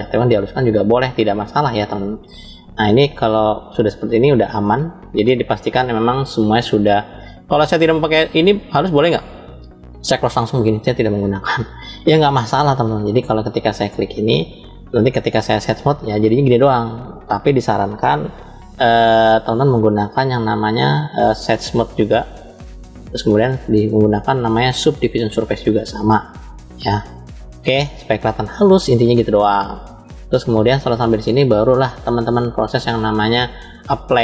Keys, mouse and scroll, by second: 0.0 click, 1.9-2.4 scroll up 2, 3.0-3.6 scroll up 2, 3.6 scroll down 2, 4.3 scroll down 1, 4.4-5.2 shift+middle drag, 10.1 click, 14.0-17.1 drag, 14.0 right click, 19.3 ctrl+z, 21.0-22.2 drag, 21.0 right click, 23.4-25.4 drag, 28.7-29.2 scroll up 2, 29.9-31.9 middle drag, 29.9 scroll up 1, 31.8 scroll up 1, 34.1-34.2 drag.